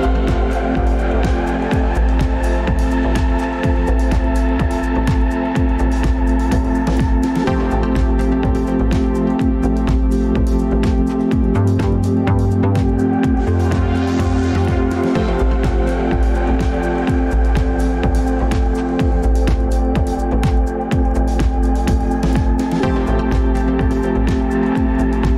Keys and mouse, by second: 4.4 click, 13.5 drag, 20.5 drag.